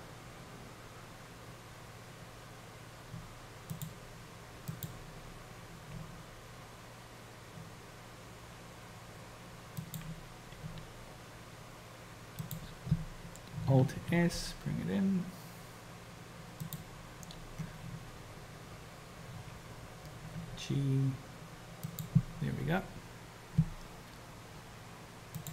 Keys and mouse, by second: 4.8 click, 6.2 r, 10.8 g, 13.9 alt+s, 20.3 g.